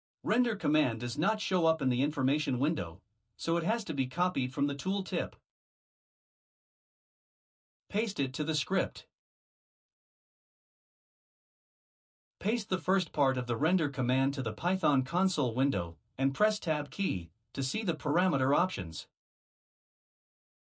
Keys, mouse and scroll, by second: 0.8 click, 8.7 ctrl+v, 13.0 click, 15.4 ctrl+c, 16.8 click, 17.5-18.4 BackSpace, 19.3 ctrl+v.